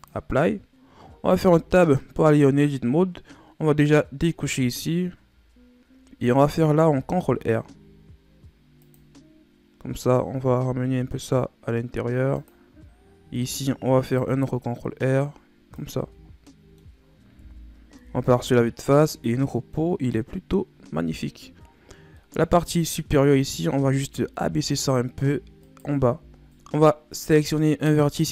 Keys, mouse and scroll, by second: 1.3 Tab, 2.0-4.7 middle drag, 4.7 click, 5.4-7.0 shift+scroll up 1, 7.0 ctrl+r, 13.2 ctrl+r, 15.9 Tab, 16.3 scroll down 2, 16.4-17.4 middle drag, 17.4 KP_1, 17.9 a, 18.4-18.8 scroll down 1, 18.8-20.2 middle drag, 20.2-21.5 scroll up 3, 21.5-22.1 scroll up 1, 22.1-22.5 middle drag, 22.5-22.9 scroll up 2, 22.9 right click, 23.2 Tab, 23.7-24.9 scroll up 5, 25.6 alt+right click, 26.3 right click, 26.8-27.5 scroll down 3, 27.5-28.2 scroll up 3, 28.2 right click.